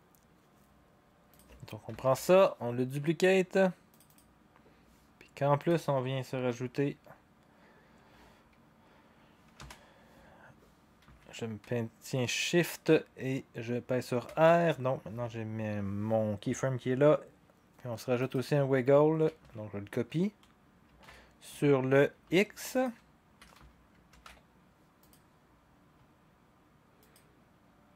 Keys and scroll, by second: 2.0 ctrl+d, 9.6 u, 14.2 r, 21.0 ctrl+c, 24.1 ctrl+v.